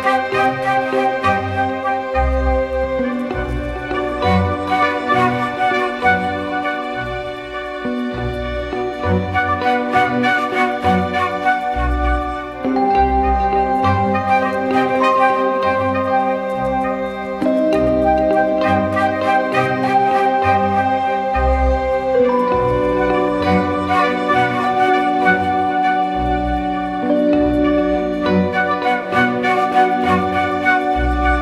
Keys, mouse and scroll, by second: 2.3 double click, 3.2-4.0 typing, 5.4-6.0 typing, 7.4 double click, 23.9-24.8 typing, 25.5 ctrl+-.